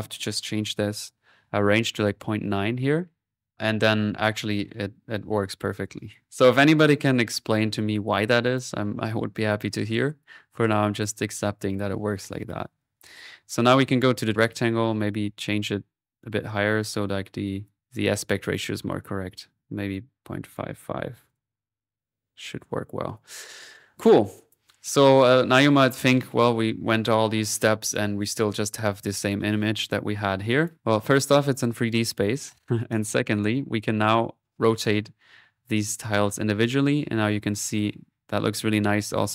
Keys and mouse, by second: 6.2 middle click, 6.6 right click, 7.1 click, 7.8 middle click, 8.1 click, 9.4-10.4 drag, 10.4 middle click, 10.8-11.9 drag, 12.4 right click, 12.8 click, 13.4 click, 14.1 click, 14.4 click, 15.6-17.8 drag, 17.8 middle click, 19.0 middle click, 19.9-22.0 drag, 22.4 middle click, 23.1 click, 24.3-26.9 drag, 27.5 click, 29.7 middle click, 30.6 click, 32.9-34.2 drag, 34.4-39.3 drag.